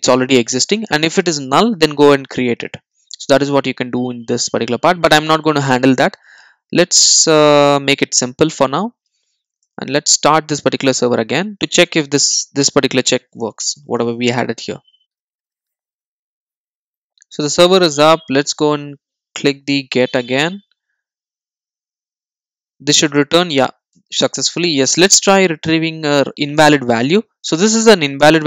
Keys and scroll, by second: 7.5 super+r.